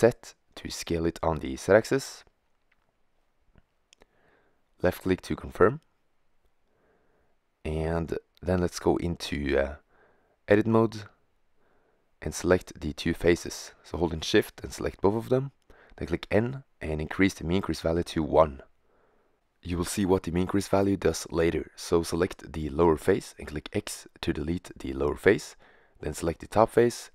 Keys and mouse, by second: 6.1-8.1 middle drag, 9.4-9.9 middle drag, 15.0 middle click, 15.4 n, 16.5-18.4 middle drag, 19.2-21.1 middle drag, 21.3-23.0 right drag, 22.2 x.